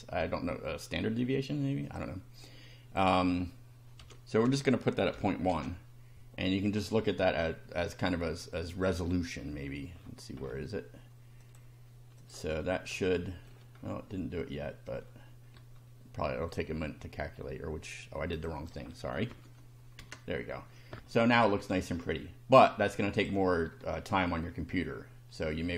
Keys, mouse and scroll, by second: 1.8 click, 2.4 click, 4.0 ., 4.4 1, 5.2 0, 5.5 Return, 6.7 click, 8.5 scroll down 1, 9.4 scroll down 1, 10.0-10.7 scroll down 4, 11.4 click, 12.2 click, 12.6-13.1 scroll down 2, 13.1-13.6 shift+middle drag, 13.7-14.6 shift+scroll up 2, 15.0-15.3 scroll down 2, 16.5 click, 18.4 click, 19.3 1, 21.1 shift+middle click, 22.5 click, 23.2 click, 23.8-24.4 shift+middle drag, 24.4 shift+scroll down 1.